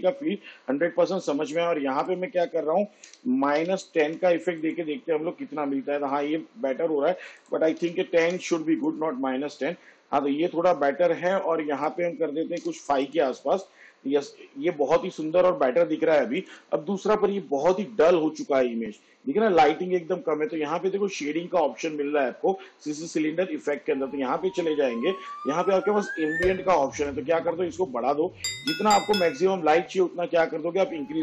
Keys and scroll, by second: 3.1 -, 3.7 1, 4.2 0, 7.8 1, 8.3 0, 12.7 5.